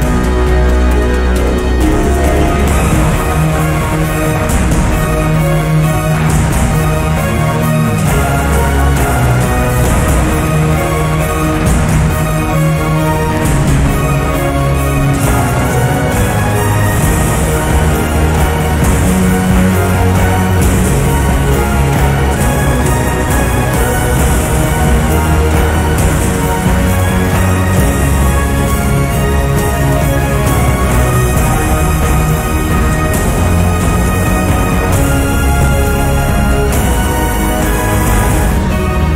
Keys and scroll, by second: 20.1-21.6 typing, 21.7 Return, 23.5 1, 24.4 6, 24.8 Return.